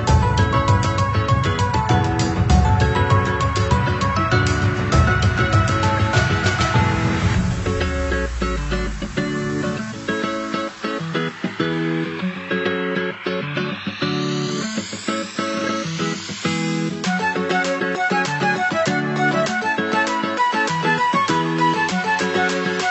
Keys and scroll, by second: 8.2 ctrl+c, 8.4 ctrl+v.